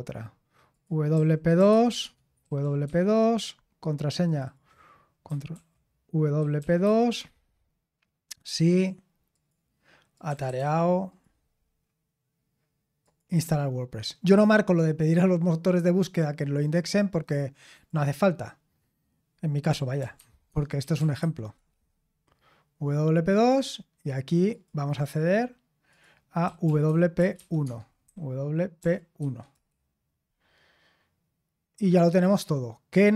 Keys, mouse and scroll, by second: 0.7 click, 1.1-2.8 typing, 4.0-4.7 typing, 4.2 click, 5.5 ctrl+a, 6.3-7.3 typing, 8.5 click, 9.3 click, 10.0-11.0 typing, 10.1 click, 11.6-13.0 scroll down 1, 17.7 click, 19.7-21.7 typing, 23.3 click, 24.5 click, 25.9 click, 26.4-29.2 typing, 29.5 Return.